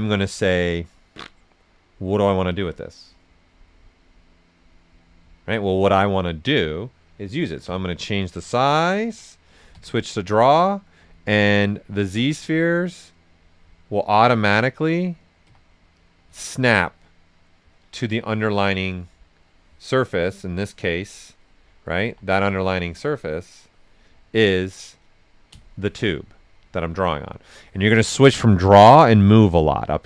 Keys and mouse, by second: 7.6 e, 7.8-9.7 drag, 9.7 q, 10.2 click, 11.3 click, 11.7 right click, 12.3 click, 15.4 w, 15.9 click, 16.2 q, 16.8 click, 17.6-19.0 right drag, 19.0 click, 19.6 alt+right click, 20.8 click, 22.0 w, 22.3 click, 24.0 right click, 25.5 q, 28.6 click.